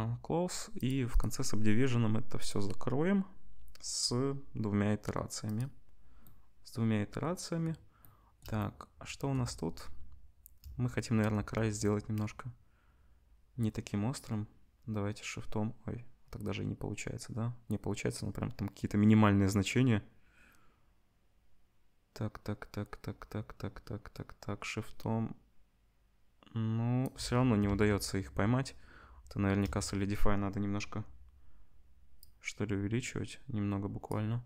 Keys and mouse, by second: 0.8 click, 0.9 middle click, 1.1-34.4 drag, 28.3 ctrl+z.